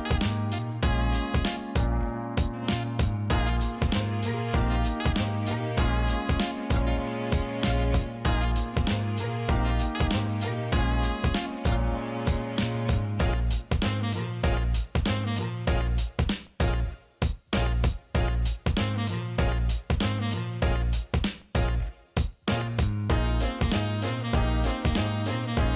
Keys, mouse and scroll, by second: 0.0 alt+shift+middle click, 0.6 alt+shift+middle click, 1.0 alt+middle click, 2.6 alt+shift+middle click, 5.4 click, 6.9 ctrl+b, 13.4 click, 13.7 alt+middle click, 14.3 alt+shift+middle click, 14.5 alt+middle click, 15.0 alt+shift+middle click, 15.2 alt+middle click, 16.1 alt+middle click, 17.9 click, 19.1 Tab, 20.0-21.1 drag, 21.2 middle click, 21.7 Tab, 22.1-25.5 drag, 25.6 alt+middle click.